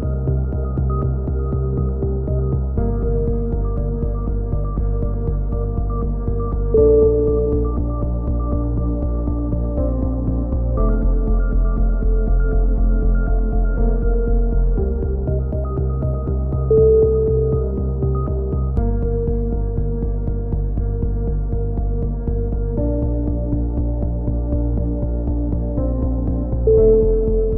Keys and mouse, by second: 1.4 KP_3, 1.6 z, 3.0 shift+d, 3.7 e, 4.2-4.7 drag, 5.1 s, 5.9 click, 6.9-11.3 drag, 11.3 right click, 11.3 g, 14.1 ctrl+z, 14.6 g, 15.6-16.8 drag, 15.8 g, 17.6 click, 18.3-18.7 drag, 18.3 g, 19.6 a, 19.8 z, 20.5-21.1 middle drag, 22.1 click, 22.2 KP_7, 22.5 z, 23.1-26.8 drag.